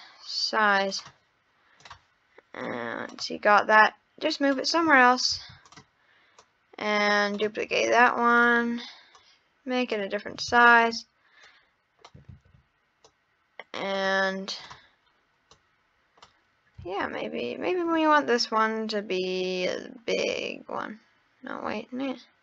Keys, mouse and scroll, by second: 1.8-2.7 drag, 3.8 click, 5.4 shift+d, 6.4 click, 8.3-9.3 drag, 10.5 ctrl+z, 11.4 click, 12.3 ctrl+z, 13.1 click, 14.6 click, 16.8 s.